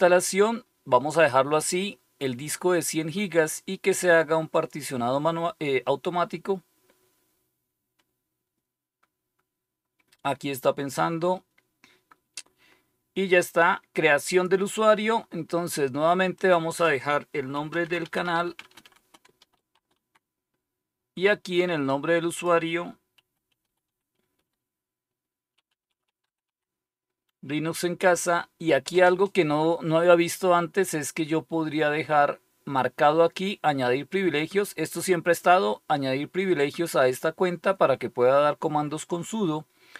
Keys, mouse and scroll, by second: 4.4 click, 14.2 click, 16.3 click, 16.7 click, 17.2-20.4 typing, 21.8 click, 22.8-24.3 typing, 23.1 click, 25.3-26.9 typing.